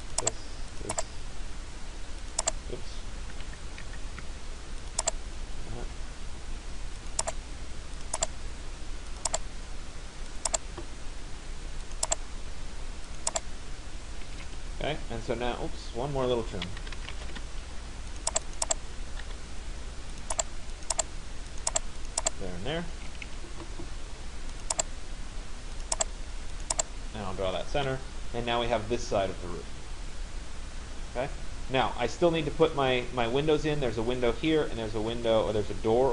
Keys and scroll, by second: 3.2 ctrl+z, 14.0 Escape, 17.4 Return, 23.2 Escape, 27.5 Return.